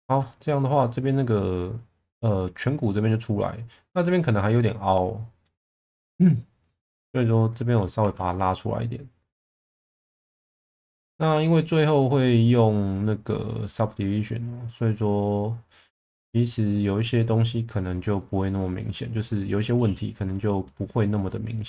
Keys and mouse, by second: 4.9-5.4 middle drag, 5.6 Tab, 7.0 2, 8.0 1, 8.4 click, 10.9 click, 14.8 click, 17.4 click, 18.7 click, 19.8-20.6 middle drag, 21.2 click.